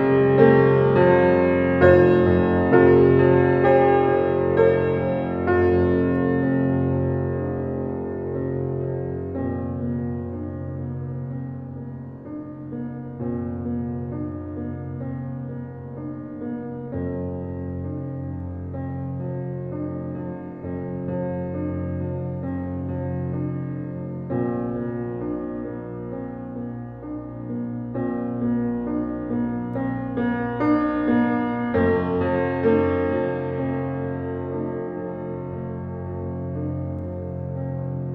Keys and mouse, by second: 0.3-1.1 typing, 2.3 typing, 3.0-3.7 drag, 4.3 right click, 4.8-5.5 typing, 5.0-6.7 drag, 6.9-8.3 typing, 9.8 click, 10.9 click, 11.8-12.5 typing, 13.0 click, 14.5-16.9 typing, 15.4 click, 18.3 click, 19.3 click, 21.3-22.0 drag, 21.4-22.2 typing, 22.0 middle click, 22.5-23.3 drag, 23.3 middle click, 23.4-24.7 drag, 25.3-26.0 drag, 27.1-27.9 ctrl+alt+drag, 27.3-29.4 typing, 28.2 alt+shift+click, 30.8 click, 33.5 click, 34.9-36.4 drag, 36.6-37.9 drag.